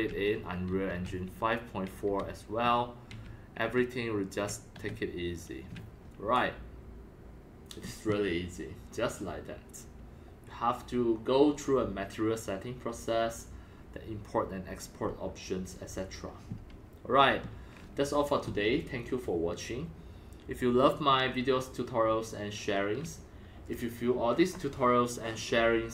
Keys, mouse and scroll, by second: 0.0-5.6 typing, 2.7 right click, 3.0-4.0 right drag, 4.3 right click, 5.6 right click, 6.4-7.6 drag, 9.9-11.8 right drag.